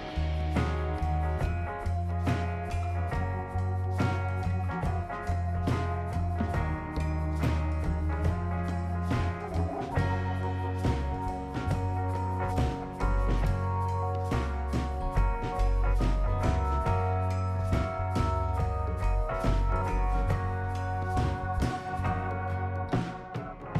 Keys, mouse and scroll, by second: 0.3 scroll up 1, 1.6 click, 4.6 click, 6.3 click, 7.3 click, 8.4 space, 13.2 click, 14.2-14.7 scroll up 4, 16.1 click, 17.9 click, 18.1 scroll down 1, 18.9 scroll down 1, 19.3 right click, 20.8 scroll down 1, 20.9 scroll up 1, 21.1 right click, 23.3 click.